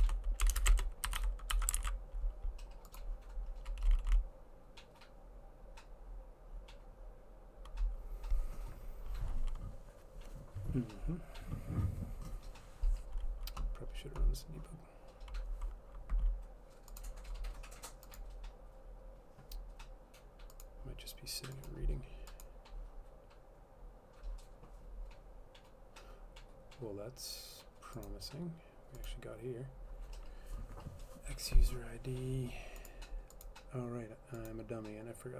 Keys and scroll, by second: 0.0-1.8 typing, 1.8 ctrl+s, 3.2-4.0 typing.